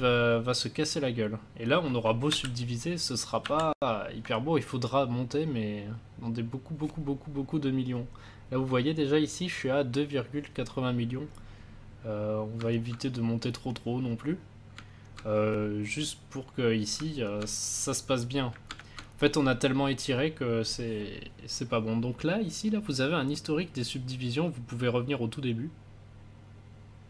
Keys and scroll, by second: 2.3 ctrl+d.